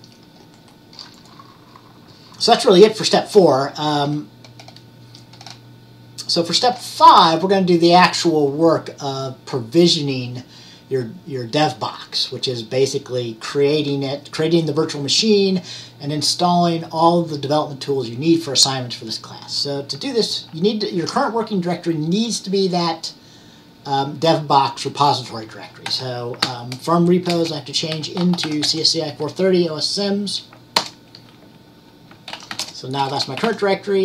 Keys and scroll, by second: 26.0-26.5 typing, 27.8-29.0 typing, 32.2-34.0 typing.